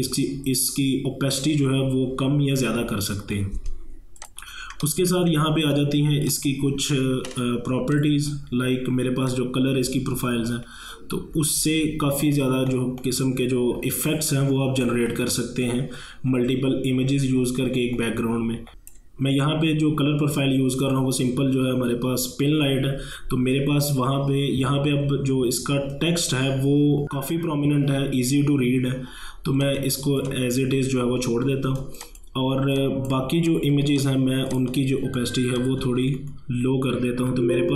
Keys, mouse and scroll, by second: 4.2 click, 4.3 click, 4.8 ctrl+1, 5.1 space, 5.3 click, 5.7 space, 6.3 click, 10.9-11.8 scroll down 1, 18.7 space, 29.6-31.8 drag, 31.8 space, 32.0 click, 32.3 space, 33.5 click, 36.1 shift+scroll down 1.